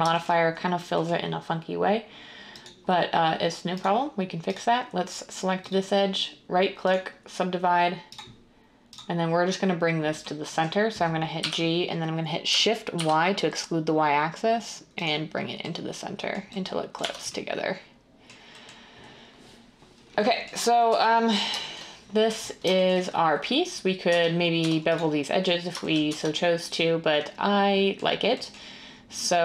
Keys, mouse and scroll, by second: 11.4 g, 12.9 y, 17.0 Tab, 20.9 1, 24.1 Tab, 24.6 Tab, 26.1 Tab.